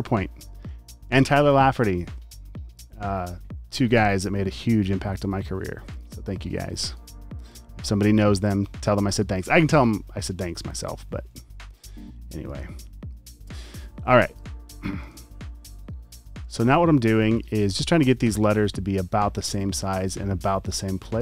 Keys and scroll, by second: 5.5 typing, 6.6 typing, 8.8-9.5 typing, 10.5 super+z, 11.5-14.1 typing, 15.6 space, 16.1 alt+super+space, 16.2 a, 17.8 typing.